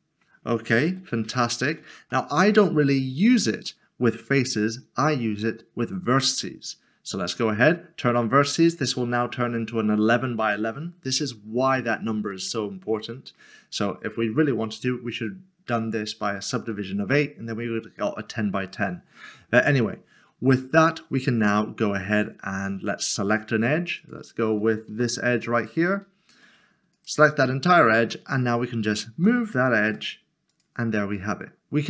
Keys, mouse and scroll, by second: 1.3 ctrl+z, 2.3 middle click, 8.6 middle click, 8.9 click, 12.3 middle click, 16.7 middle click, 21.6 middle click, 24.9 typing, 25.6 click, 27.5 middle click, 28.1-29.1 scroll down 1, 29.2-29.9 typing, 30.5 click, 31.0 middle click.